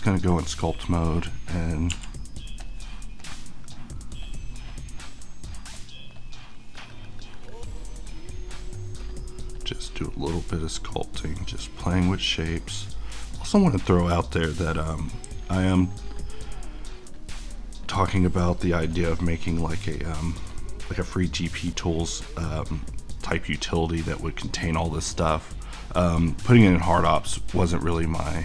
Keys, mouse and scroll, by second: 0.3-1.9 typing, 2.6 click.